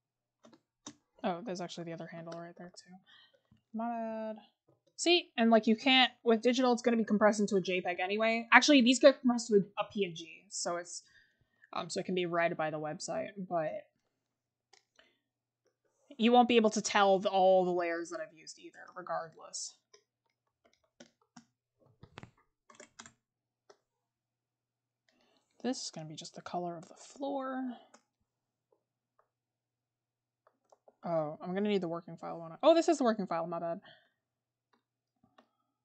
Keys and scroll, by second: 21.2 scroll, 30.7 scroll down 1, 31.1 scroll up 1.